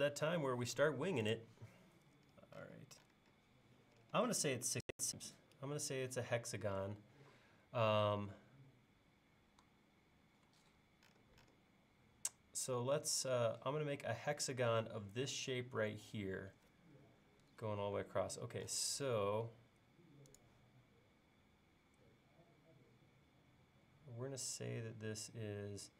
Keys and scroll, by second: 18.4 l.